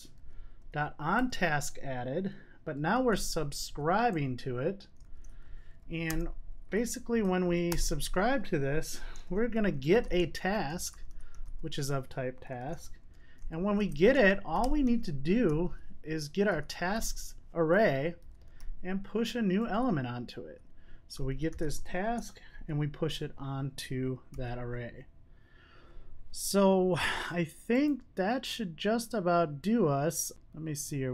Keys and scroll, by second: 7.1 super+z, 17.7 Return, 24.5 super+s.